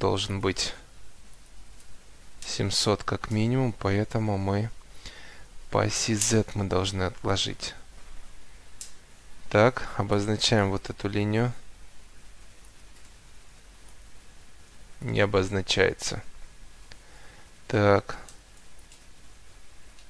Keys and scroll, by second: 8.8 Delete.